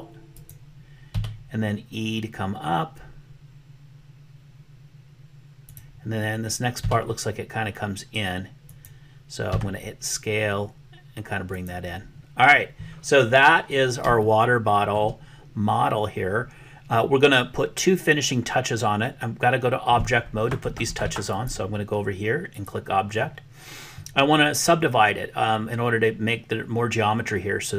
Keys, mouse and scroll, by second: 1.1 e, 6.8 e, 9.6 s, 14.3 shift+middle click, 21.3-22.7 drag.